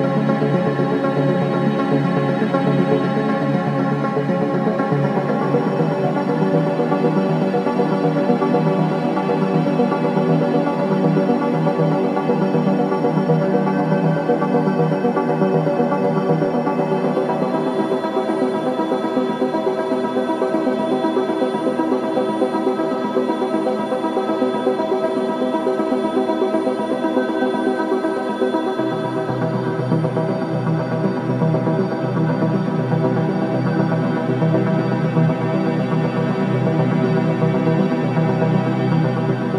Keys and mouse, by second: 0.0 middle click, 0.2 click, 0.2 middle click, 0.4 click, 0.9 g, 4.2 Tab, 7.2 g, 11.2 s, 20.7 ctrl+b, 25.4 click, 28.1 ctrl+b, 31.3 Tab, 32.0 s, 34.4 g, 36.1 g, 38.1 Tab, 38.6 z.